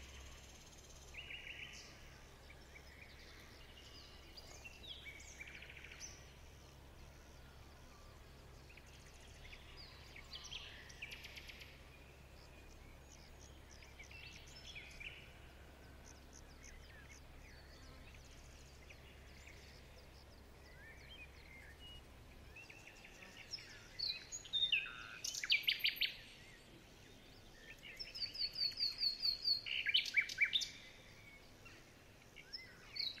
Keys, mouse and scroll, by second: 1.3 ctrl+shift+[, 2.4 alt+click, 11.0-11.4 alt+scroll up 2, 11.5 ctrl+shift+g, 12.6 alt+scroll up 1, 13.2 ctrl+z, 16.8 alt+scroll down 2, 16.9-17.8 alt+scroll up 1, 17.8 alt+scroll up 3, 17.9 ctrl+z, 18.4 shift+click, 18.9 alt+scroll down 2, 19.8 alt+scroll up 2, 19.8 shift+click, 19.9 shift+click, 20.4 alt+scroll down 7, 20.6 alt+scroll up 1, 20.8-21.1 alt+scroll down 1, 21.3 shift+click, 21.4 shift+click, 21.6 shift+click, 21.7 shift+click, 21.8 alt+scroll down 3, 21.9 alt+scroll up 4, 22.1 shift+click, 22.2 shift+click, 22.3 alt+scroll down 1, 22.4 alt+scroll up 1, 22.7 shift+click, 22.8 shift+click, 23.0 alt+scroll up 1, 23.1 shift+click, 23.2 shift+double click, 23.2 shift+click, 23.9 shift+click, 24.1 shift+scroll down 1, 24.5 shift+scroll up 3, 24.8 shift+click, 24.9 shift+click, 25.2 shift+click, 25.3 shift+click, 25.9 shift+scroll down 5, 26.6 alt+scroll up 2, 26.9 shift+click, 27.4 shift+click, 27.7 shift+click, 27.7 shift+scroll down 6, 27.9 shift+scroll up 3, 28.1 alt+scroll down 2, 28.5 shift+click, 28.6 shift+click, 28.9 shift+click, 29.3 alt+scroll down 2, 29.4 alt+scroll up 1, 29.6 shift+click, 29.7 shift+double click, 29.8 shift+click, 30.2 shift+click, 30.4 shift+click, 30.8 alt+scroll up 10, 30.9 shift+click, 31.0 shift+click, 31.1 alt+scroll down 11, 31.7 shift+click, 31.8 shift+click, 32.0 alt+scroll up 1, 32.1 alt+scroll down 2, 32.3 shift+click, 32.5 alt+scroll up 2, 32.7 shift+click, 32.8 alt+scroll down 4, 33.0-33.2 alt+scroll up 6.